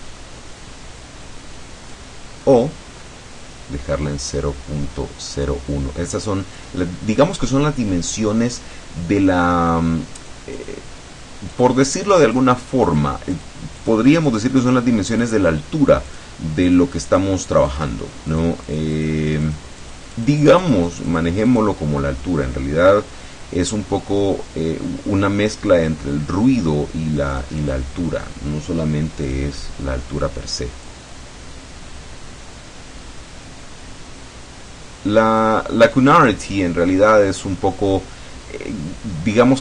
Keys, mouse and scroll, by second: 3.1-6.5 middle drag, 10.2 click, 11.5 click, 12.0 click, 12.7 click, 13.4 click, 13.9 click, 14.4 click, 15.2 click, 16.2 click, 16.7 click, 17.2 click, 17.8 click, 18.4 click, 19.5 click, 19.9 click, 21.6 click, 27.4 click, 29.3 click, 30.9-35.7 drag.